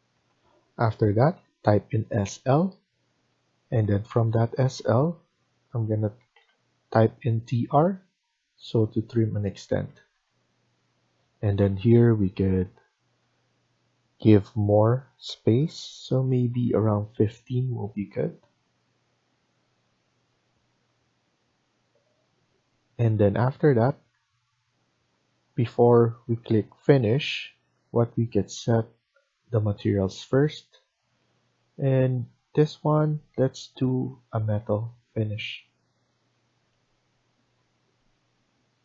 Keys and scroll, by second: 0.1 Delete, 1.3-1.9 typing, 3.7 Escape, 4.1 Escape, 5.8-6.7 typing, 9.7 Escape, 10.0 Escape, 11.9 Right, 12.3 Right, 12.5 Right, 16.2-17.0 typing, 17.9 Escape, 18.1 Escape.